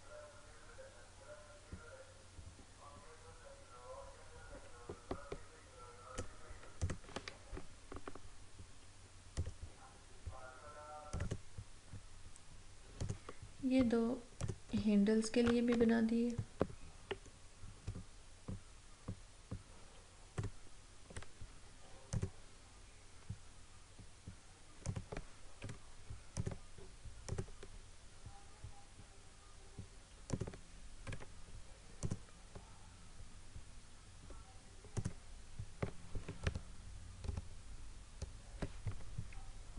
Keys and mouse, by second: 9.5-22.1 drag, 24.8 click, 25.6 Up, 26.3 click, 30.3 click, 31.1 Up, 32.0 click, 35.0 click, 36.5 ctrl+-.